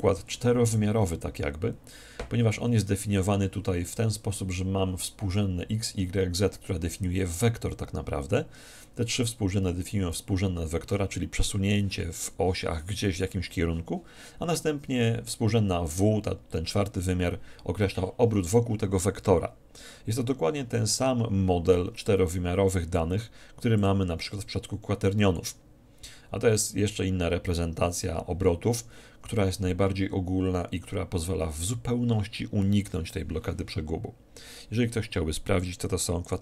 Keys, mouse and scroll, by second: 23.8-25.6 drag.